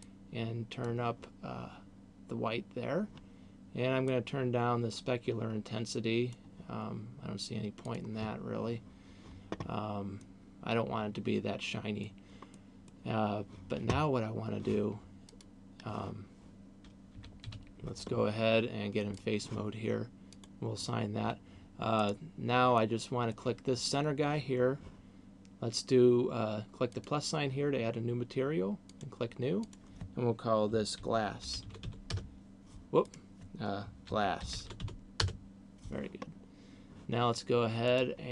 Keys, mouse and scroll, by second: 2.5-3.0 scroll down 3, 4.3 click, 7.8 click, 10.0 middle click, 12.5 middle click, 15.0 click, 17.0 a, 17.5 a, 19.0 click, 20.5 click, 22.0 right click, 22.8 middle click, 27.0 click, 28.8 click, 29.8 click, 33.0 click, 36.5-37.8 scroll down 2, 37.8 click.